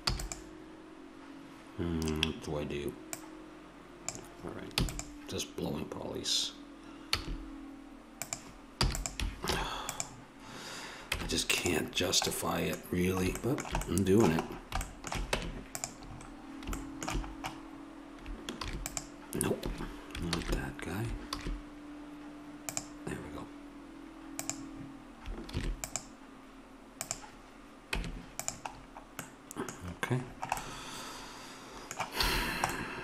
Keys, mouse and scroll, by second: 0.0 e, 4.7 e, 7.1 s, 8.9 e, 9.5 alt+m, 11.2 Tab, 15.3 Tab, 17.3 middle click, 18.6 ctrl+r, 20.4 ctrl+z, 21.3 ctrl+r, 25.5 ctrl+r, 28.0 Tab, 32.3 a.